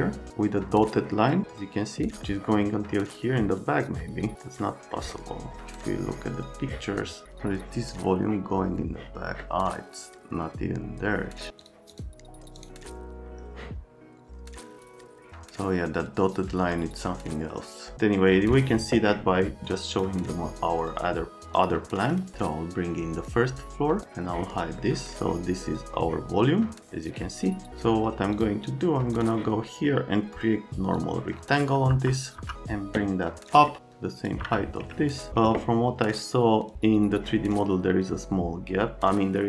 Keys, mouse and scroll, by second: 11.6 click, 11.6 middle click, 11.9 click, 12.6 click, 17.9 right click, 31.9 F3, 31.9 click, 33.5 click, 33.8 click, 34.4 F3, 34.9 alt+right click, 36.7 click.